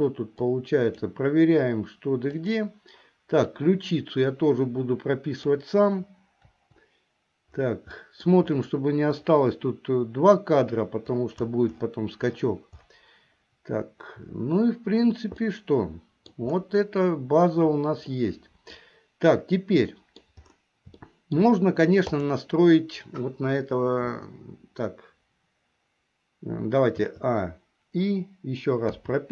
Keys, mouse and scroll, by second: 0.6 click, 2.4 click, 3.5-5.5 drag, 6.6 Delete, 8.1 middle click, 15.6 middle click, 18.2 middle click, 20.0 middle click, 21.2 shift+middle click, 22.3 click, 27.1 a, 29.1 i.